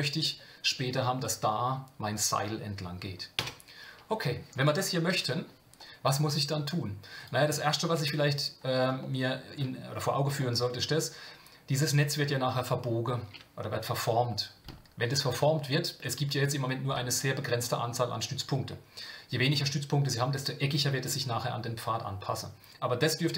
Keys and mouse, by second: 3.4 Tab, 5.1 KP_Divide, 6.4 Tab, 8.0 Tab, 9.0 shift+middle click, 10.4 shift+middle click.